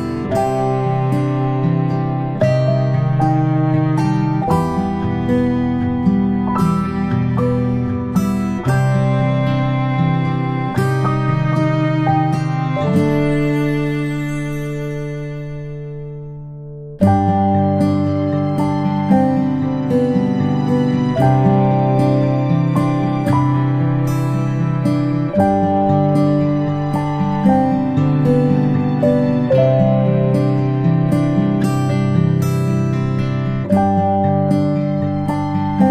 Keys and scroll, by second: 18.1-18.4 ctrl+space, 20.9 s, 27.3-27.7 ctrl+space, 31.9 Tab, 32.3 Tab, 34.9-35.7 space, 35.7 p.